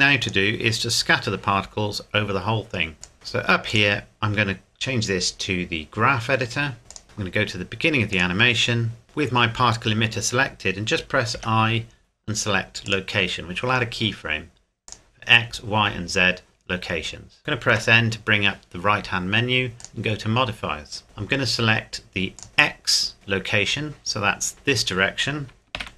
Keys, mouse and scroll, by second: 0.2 click, 0.7-2.8 scroll down 2, 3.0 click, 3.1-3.7 scroll up 1, 3.7 click, 6.9 click, 8.1 click, 11.3 i, 12.9 click, 17.7 n, 19.8 click, 22.4 click, 24.5 click, 25.7 ctrl+z.